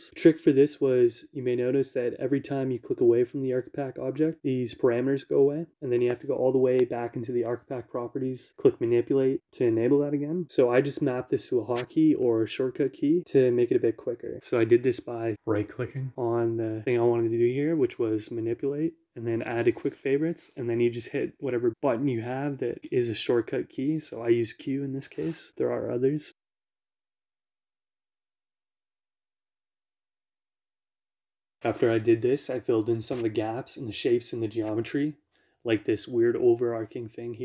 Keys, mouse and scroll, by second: 0.0 middle click, 1.8 click, 6.3 click, 6.8-8.2 drag, 10.3 click, 11.6 click, 12.9-15.2 middle drag, 15.6 right click, 18.8 click, 22.4 q, 25.4 click, 26.8 middle click, 28.1 click, 29.8 click, 31.0-32.0 middle drag, 32.5 shift+middle click, 35.3 shift+click, 35.5 Tab.